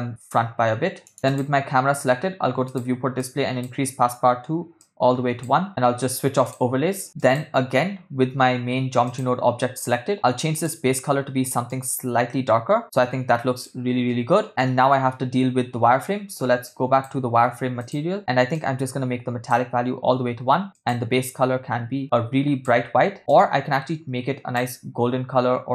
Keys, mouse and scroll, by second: 1.3 click, 2.7 drag, 3.2 click, 4.8 click, 6.6 click, 7.2-9.5 drag, 10.5 click, 16.7 click, 17.8 click, 18.6 click, 20.7 click.